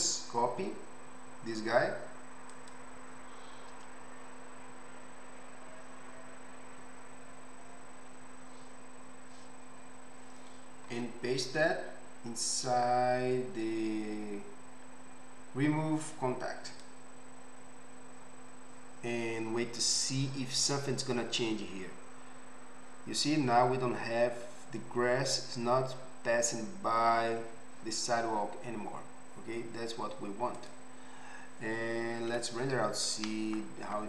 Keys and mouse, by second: 11.0 m, 19.8-30.6 middle drag, 30.6 click, 30.8-32.3 middle drag.